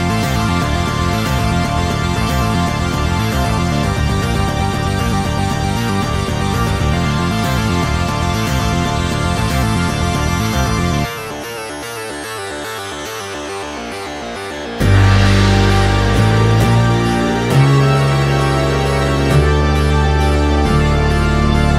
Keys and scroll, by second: 10.4 Escape, 15.7 Escape, 20.3 Escape.